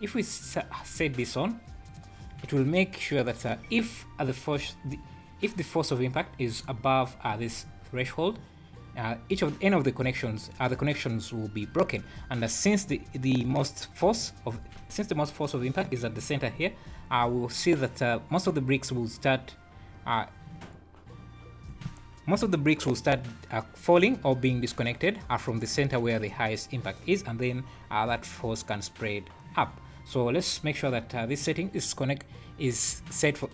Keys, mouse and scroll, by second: 1.9 click, 2.3 scroll down 4, 9.3-9.7 scroll up 2, 11.8 scroll up 2, 13.0 scroll up 3, 13.9-14.3 scroll down 3, 16.7 scroll down 3, 17.6 scroll up 2, 25.9 scroll down 2.